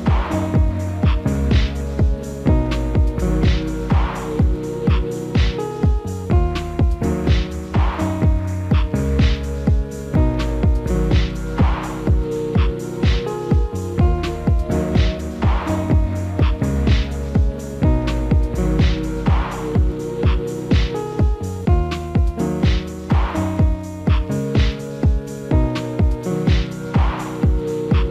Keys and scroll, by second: 3.2 alt+w, 19.8 alt+w, 27.0 F4.